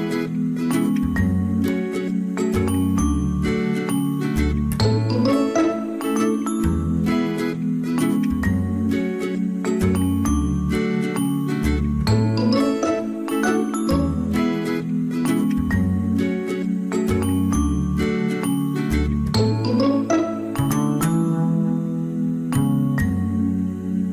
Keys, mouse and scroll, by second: 0.4 ctrl+z, 3.3 space, 9.9 ctrl+z, 14.2 ctrl++, 14.5 space, 16.3 ctrl+z, 16.6 ctrl+z.